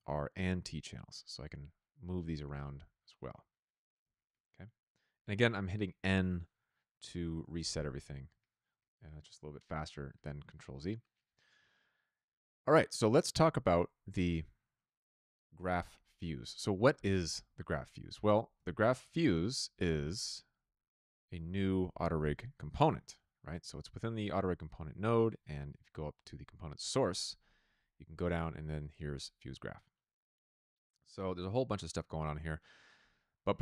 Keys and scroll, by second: 0.5 Return, 2.7 t, 7.5 n, 18.5 Tab, 18.5-19.7 typing, 19.8 Return, 22.1 r.